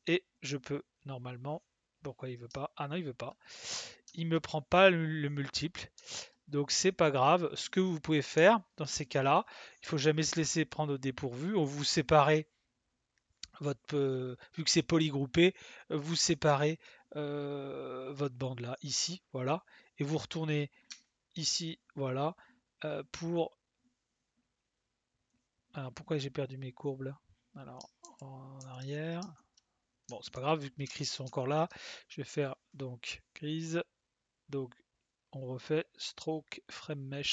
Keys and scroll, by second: 28.0 ctrl+z.